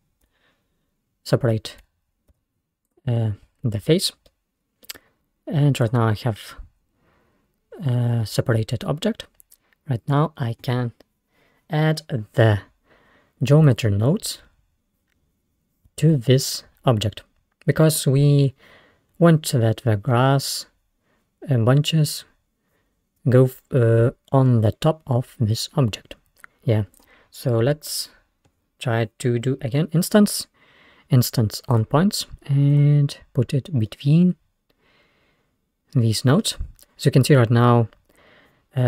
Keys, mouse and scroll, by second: 0.8 p, 2.4 Tab, 2.9 click, 4.3-5.4 middle drag, 5.4 scroll up 1, 5.9 click, 13.7-16.6 drag, 25.2-26.4 scroll down 1, 26.4-27.0 scroll up 2, 27.0 click, 27.8 shift+a, 33.9-36.8 middle drag.